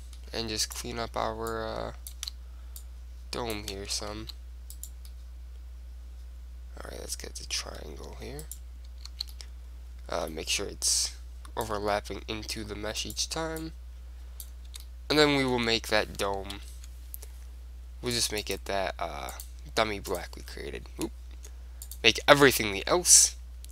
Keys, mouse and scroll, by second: 0.8 click, 1.2-2.4 right drag, 1.6-4.8 drag, 2.4 z, 3.9 ctrl+z, 4.9-6.5 right drag, 5.2 click, 5.9-6.9 middle drag, 8.5-10.2 right drag, 9.2 z, 9.4-11.4 middle drag, 11.0-12.9 drag, 12.0 right click, 12.7 middle click, 13.2 click, 13.2 right click, 14.8 Tab, 15.0 click, 15.7 Tab, 15.7-16.7 middle drag, 16.7 ctrl+l, 18.3-21.3 drag, 21.1 middle click, 22.0-23.7 drag.